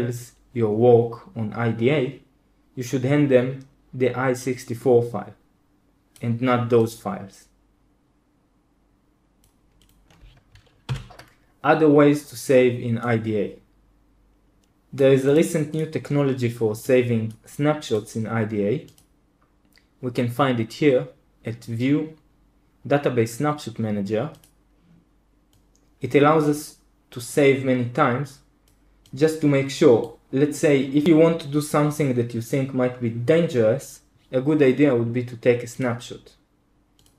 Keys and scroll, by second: 11.0 super+l.